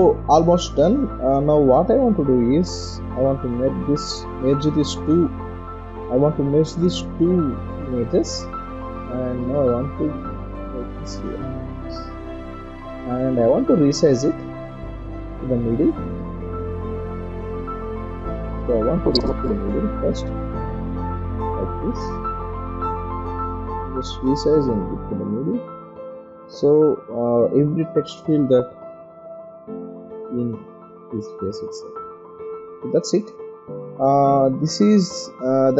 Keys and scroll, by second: 4.2 ctrl+0, 18.3 ctrl+0, 18.7 ctrl+-, 20.3 ctrl+t, 21.8 Escape, 27.2 ctrl+t, 28.0 ctrl+0, 32.7 Return, 33.2 ctrl+0.